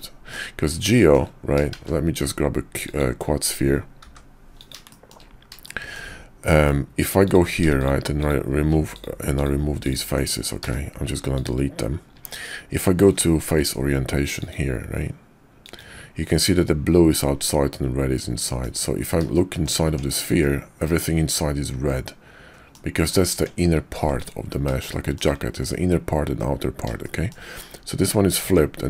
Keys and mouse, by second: 0.9 shift+drag, 1.7 shift+a, 4.0 g, 4.9 shift+click, 5.7 shift+middle click, 6.5 Tab, 7.8 shift+click, 8.2 shift+click, 9.4 ctrl+click, 9.8 ctrl+click, 10.6 x, 12.1 Tab, 14.4-16.0 drag, 16.4-18.7 middle drag, 19.2-19.6 shift+middle drag, 19.8 Tab, 20.4-22.7 drag, 23.3 Tab, 24.0 x, 24.8-25.2 shift+drag, 27.0 shift+drag, 28.4 Tab.